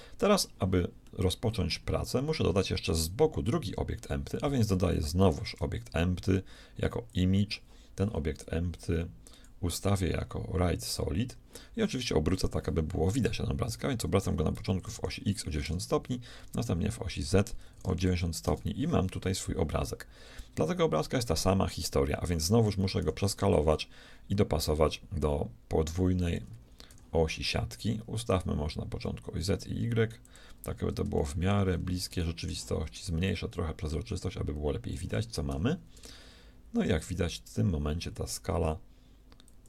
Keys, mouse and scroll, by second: 1.1-2.9 middle drag, 3.5 KP_3, 5.3 shift+a, 9.3-11.1 drag, 14.2 r, 16.4 r, 23.0 s, 26.9 g, 30.7-31.9 middle drag, 33.3-34.9 drag, 33.3-34.9 middle drag, 35.5 g.